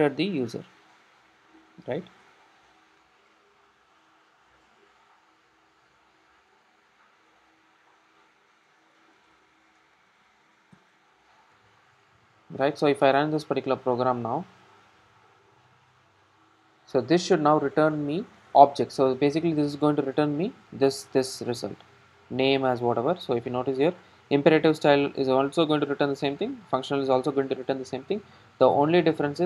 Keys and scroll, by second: 5.0 super+c, 6.5 super+v.